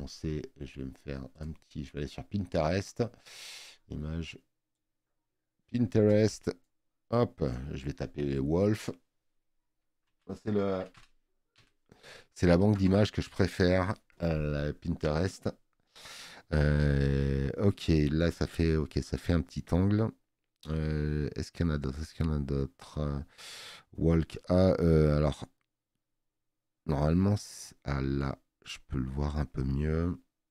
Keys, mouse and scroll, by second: 4.8 click, 7.5 click, 10.0 z, 10.6 o, 26.0 scroll down 1, 26.8 scroll down 2.